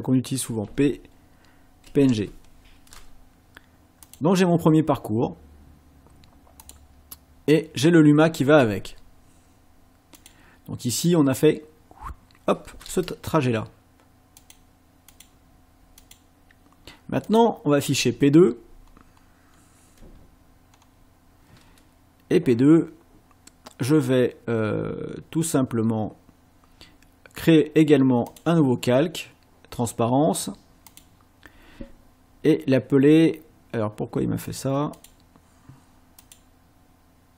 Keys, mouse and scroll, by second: 0.7-2.5 typing, 4.0 click, 6.6 click, 10.2 click, 14.4 click, 15.1 click, 16.0 click, 17.3 click, 18.8-19.7 ctrl+scroll down 6, 20.7-21.0 scroll up 1, 28.3 click, 30.9 click, 34.5 click, 35.0 click, 36.2 click.